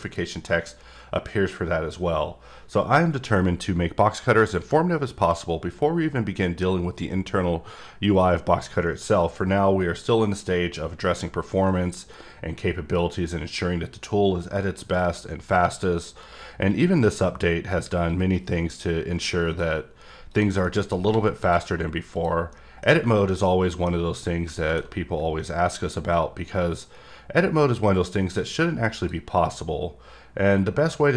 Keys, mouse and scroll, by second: 0.0 click, 16.7 click, 18.1 click, 20.3 click, 20.6 middle click, 21.4 click, 22.2 click, 22.5 middle click, 23.3 middle click, 26.6 click.